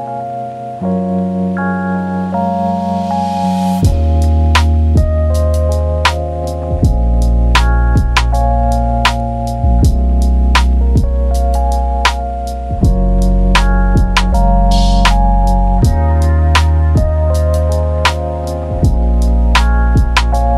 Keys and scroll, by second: 1.2 Delete, 2.4 Delete, 2.8 ctrl+d, 3.2-4.3 typing, 13.2-14.3 typing, 15.5 v, 15.8-16.1 v.